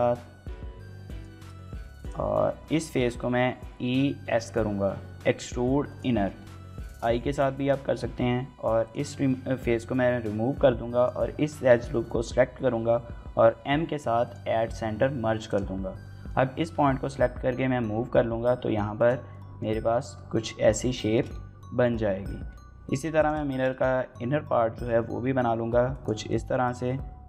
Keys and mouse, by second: 0.9 click, 1.2 shift+middle click, 1.3 middle click, 1.6 3, 2.3 middle click, 2.8 shift+middle click, 3.2 e, 3.6 s, 5.7 click, 5.9 shift+middle click, 6.2 middle click, 6.7 shift+middle click, 7.3 shift+middle click, 7.7 middle click, 9.3 middle click, 9.7 1, 10.3 2, 10.8 alt+click, 13.3 m, 15.0 1, 15.8 middle click, 16.4 g, 16.9 x, 18.8 click, 19.1 middle click, 19.8 Tab, 20.9 shift+middle click, 21.1 middle click, 22.2 Tab, 22.8 3, 23.3 shift+middle click, 23.5 middle click, 24.5 i, 25.7 click, 26.2 middle click, 26.5 s.